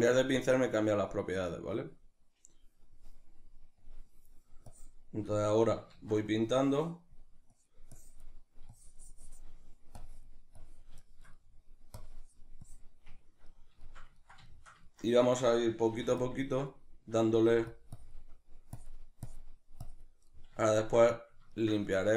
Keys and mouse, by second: 5.9 ctrl+z, 5.9-11.1 drag, 11.1 shift+middle click, 12.0-13.2 drag, 13.2-22.1 ctrl+middle drag, 15.9 f, 16.3 click, 17.5 f, 17.8 click.